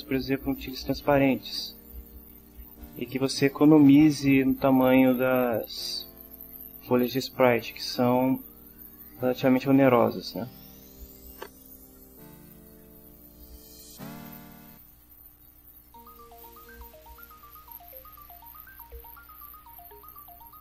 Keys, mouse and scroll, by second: 12.4 ctrl+s, 14.9 click, 18.5 click, 20.5 click.